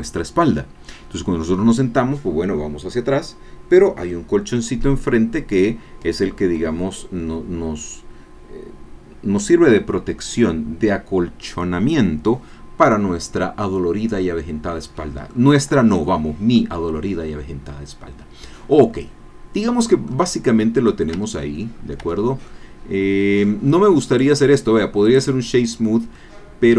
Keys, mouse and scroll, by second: 13.7 scroll down 2, 14.2 middle click, 14.7-18.9 drag, 18.9-20.3 middle drag, 20.3 scroll down 1, 20.6 click, 21.3 Tab, 21.8-22.2 scroll up 1, 22.2 Tab, 22.2 scroll down 1, 22.5-23.6 drag, 23.6 scroll up 1, 23.9 middle click, 24.2 right click, 25.1 click, 25.8-26.1 scroll down 2, 26.1-26.7 drag.